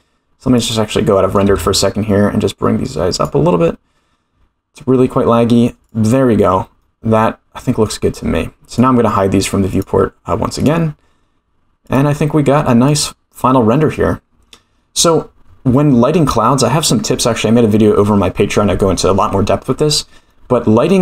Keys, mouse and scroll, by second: 0.7 click, 1.4 g, 6.4 click, 6.8-7.9 middle drag, 8.7 click, 9.7 click, 10.6 click, 11.8 click, 12.8 click, 20.3-20.9 middle drag.